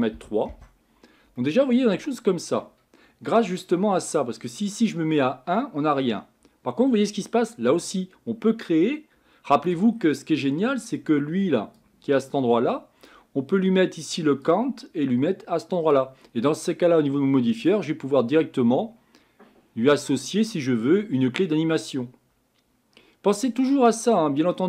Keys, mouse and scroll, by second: 0.5 click, 1.4-4.6 middle drag, 4.6-7.5 drag, 9.9-11.3 scroll down 4, 15.9 click, 17.9-20.7 drag.